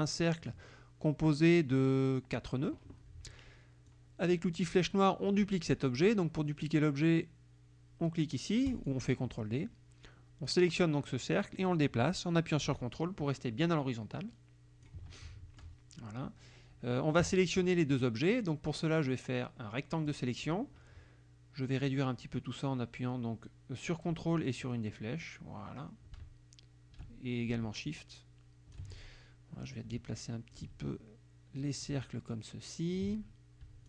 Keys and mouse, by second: 0.0 click, 3.9 click, 8.7 click, 10.5-15.0 drag, 15.2 ctrl+middle click, 19.0-20.3 drag, 24.7-29.2 ctrl+drag, 29.7 ctrl+click, 31.6-33.2 drag.